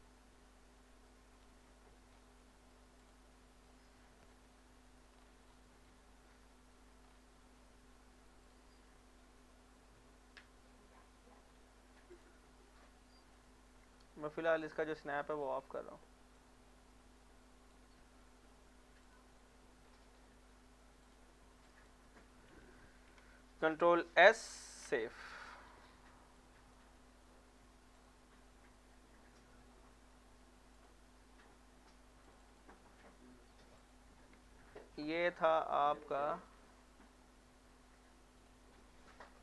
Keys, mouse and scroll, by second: 1.5 z, 2.1 scroll down 1, 2.4 middle click, 3.0 click, 3.3 middle click, 3.8 shift+middle click, 5.1 scroll down 1, 6.3 scroll up 1, 7.1 scroll down 1, 7.6 middle click, 8.4 click, 9.3-11.5 middle drag, 11.5 scroll down 1, 12.1 click, 12.5 middle click, 12.8 scroll up 1, 13.0 scroll down 1, 13.4 shift+middle click, 14.6 click, 15.0 shift+middle click, 15.4-16.4 scroll up 1, 16.4 click, 16.5-18.0 drag, 18.0 middle click, 18.5 shift+middle click, 19.1 click, 19.4 middle click, 19.8 scroll down 1, 20.6 middle click, 21.0 click, 24.2 ctrl+s, 26.4-27.9 drag, 30.7 click, 36.0-38.4 drag.